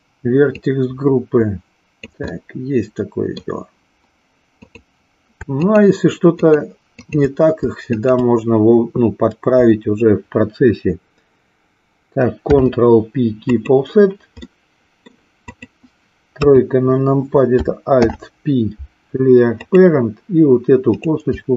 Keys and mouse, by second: 0.5-2.0 drag, 2.2-3.4 middle drag, 5.6 shift+click, 6.5 shift+click, 8.0 shift+click, 12.4 ctrl+p, 14.5 middle click, 16.5 KP_3, 17.9 alt+p, 20.7 click.